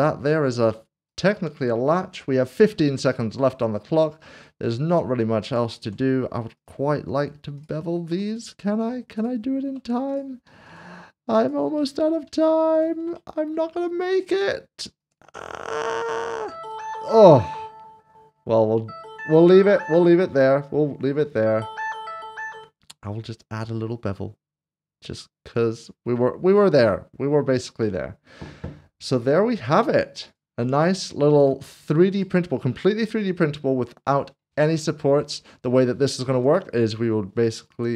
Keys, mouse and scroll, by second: 0.2 middle click, 0.6 scroll down 1, 1.4 click, 3.0 shift+middle click, 3.8-4.4 scroll up 1, 4.6 middle click, 5.5 click, 6.6 click, 8.3 alt+click, 10.6 shift+click, 11.4 shift+click, 11.8 click, 13.1 shift+click, 14.2 shift+click, 15.6 shift+click, 22.8 ctrl+b, 23.3-25.3 scroll up 1, 27.6 click, 29.7 Tab, 30.3 click, 30.6 middle click, 31.5 shift+middle click, 35.2 click, 36.3 g, 37.6 right click.